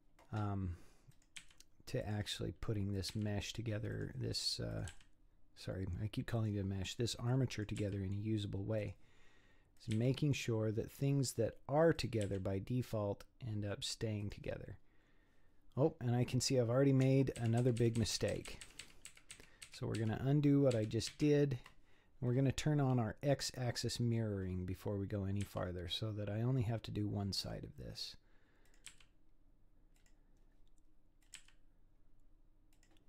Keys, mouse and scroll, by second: 1.1 click, 1.4 g, 3.0 click, 3.1 g, 4.7 click, 4.9 g, 7.5 click, 7.8 g, 9.8 click, 10.0 g, 12.0 click, 12.3 g, 14.7-15.0 scroll down 5, 16.1 scroll up 2, 16.7-17.4 scroll down 1, 17.4 ctrl+z, 17.6 ctrl+z, 17.8 ctrl+z, 18.0-18.5 ctrl+z, 18.6 ctrl+z, 18.8 ctrl+z, 19.1 ctrl+z, 19.3 ctrl+z, 19.6 ctrl+z, 20.0 ctrl+z, 20.7 ctrl+z, 21.1 ctrl+z, 23.5 click, 25.4 g, 28.7 click, 28.9 g, 31.2 click, 31.4 g.